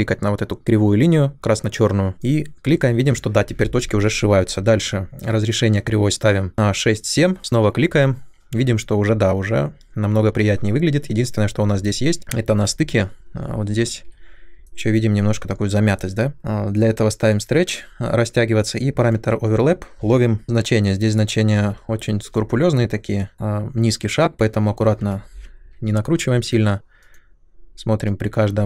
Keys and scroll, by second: 12.2 shift+f, 13.9 shift+f, 20.4 -, 21.5-23.3 typing, 24.9 Return.